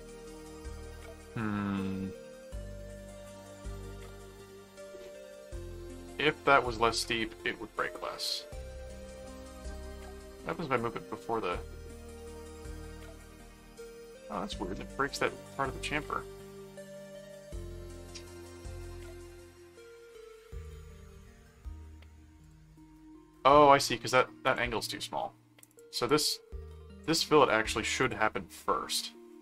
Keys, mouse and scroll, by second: 1.2-3.3 middle drag, 5.4 middle click, 10.0 click, 12.6 click, 13.4 click, 15.0 middle click, 16.3 middle click, 17.0 middle click, 19.0 click, 20.6 click, 22.4 click, 24.4 click, 25.7 click, 27.4 right click, 28.0 click.